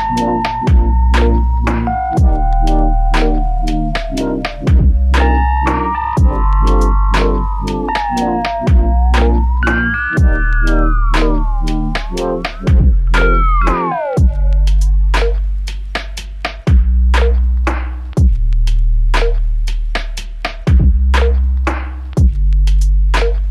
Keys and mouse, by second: 0.2 shift+click, 4.5 typing, 6.3-6.7 typing, 10.9 double click, 13.0 typing, 14.2 ctrl+alt+click, 15.9 shift+click, 17.6 shift+click, 19.6 alt+click, 21.8 ctrl+alt+click.